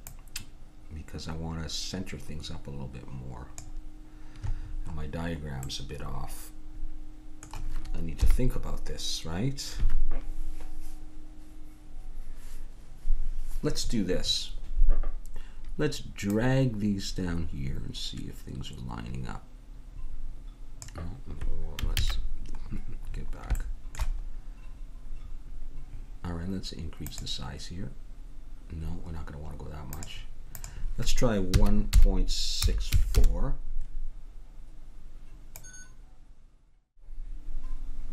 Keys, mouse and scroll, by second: 0.0-1.8 drag, 4.5-10.4 middle drag, 8.2 KP_1, 16.3-17.9 drag, 18.0 click, 22.0 ctrl+z, 23.2 middle click, 27.1-33.1 drag, 35.6-37.1 drag.